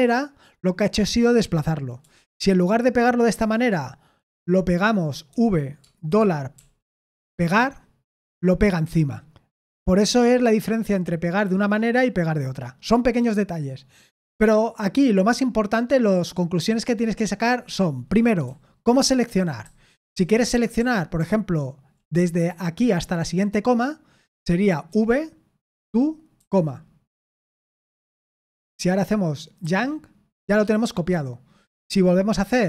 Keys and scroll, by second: 2.0 typing, 5.3-6.5 typing, 18.4-22.6 typing, 24.9-26.8 typing, 29.6 y.